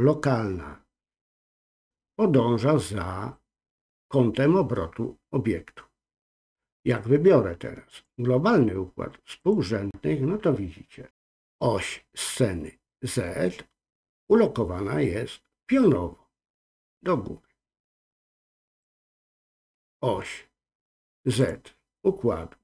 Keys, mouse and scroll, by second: 7.9-10.3 drag, 18.7-21.6 drag.